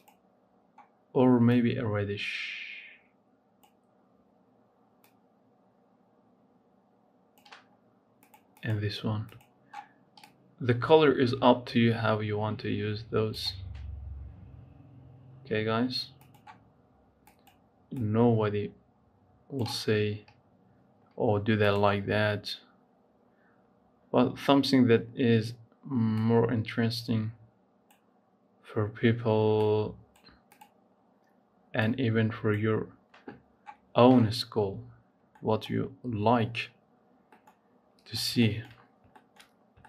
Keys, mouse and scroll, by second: 8.0 click, 8.3 click, 16.1 click, 21.6 click, 29.4-30.5 drag, 34.4 scroll down 2, 35.1 middle click, 35.7-36.4 scroll up 2, 36.4-37.2 scroll up 2, 37.2 middle click, 37.5-38.3 scroll down 9, 38.3 shift+middle click, 38.6-39.6 scroll up 8, 39.1 shift+middle click, 39.6 shift+middle click.